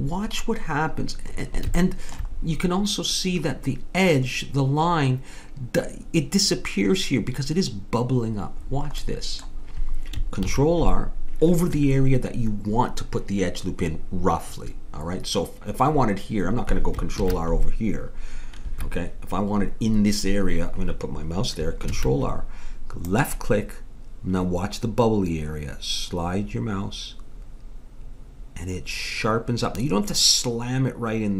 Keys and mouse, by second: 1.8-10.4 middle drag, 10.4 ctrl+r, 17.2 ctrl+r, 21.9 ctrl+r.